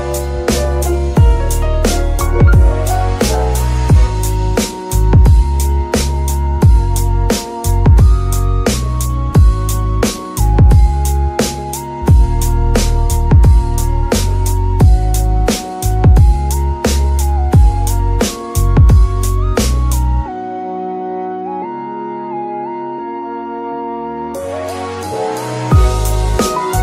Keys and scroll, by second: 15.3 g, 25.4 y.